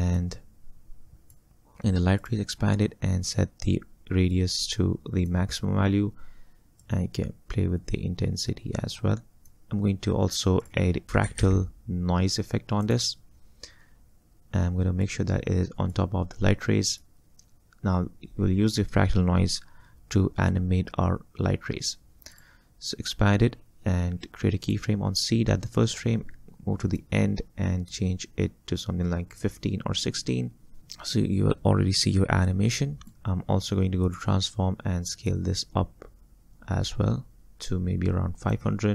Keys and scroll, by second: 10.8-11.9 typing.